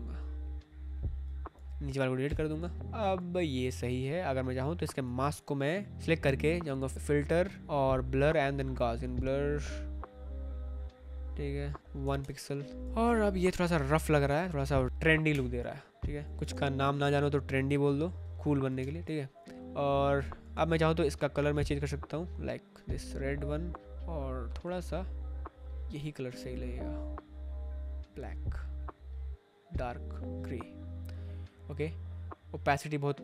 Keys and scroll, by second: 2.2 Delete, 12.0 1, 12.2 Return, 12.8 ctrl+t, 15.2 Return, 16.3 Escape, 16.5 ctrl+t, 18.4 Return, 19.1 space, 20.4 space.